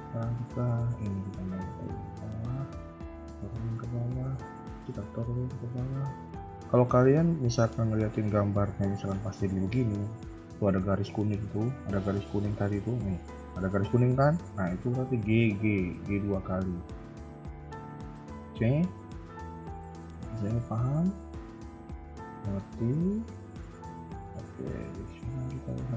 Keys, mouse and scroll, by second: 0.7 Tab, 0.7 click, 1.5 g, 2.9 click, 3.1 g, 4.2 click, 4.3 g, 5.7 KP_3, 6.4 middle click, 6.7 KP_1, 7.3 click, 9.1 g, 12.7 g, 15.9 KP_3, 16.1 KP_1, 16.5 KP_3, 17.0-17.3 scroll down 1, 17.4 shift+middle click, 18.6 click, 18.8 KP_1, 19.3 KP_3, 19.6 Tab, 19.8-20.1 scroll down 2, 20.1 KP_1, 20.6 middle click, 22.7 KP_1, 23.0 shift+middle click, 23.3 scroll up 2, 23.4 Tab, 23.8 middle click.